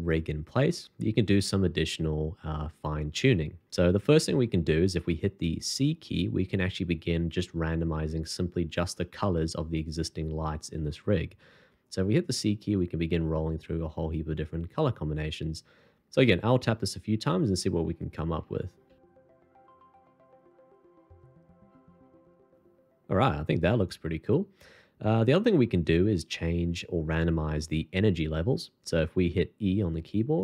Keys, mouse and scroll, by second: 12.0-19.8 typing, 21.4-22.0 c.